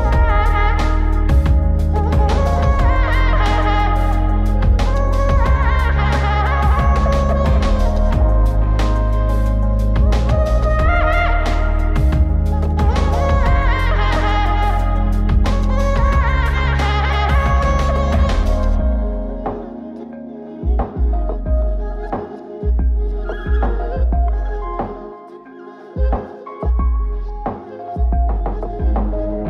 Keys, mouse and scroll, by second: 0.9 F9, 23.9 F9.